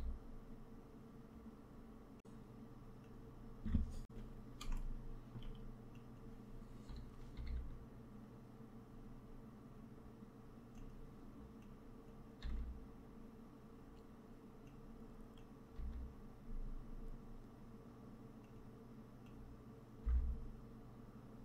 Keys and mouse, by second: 2.2 g, 4.6 shift+middle click, 5.9 click, 7.2 g, 11.5 click, 12.3 g, 15.4 click, 15.6 g, 19.3 click, 19.9 g.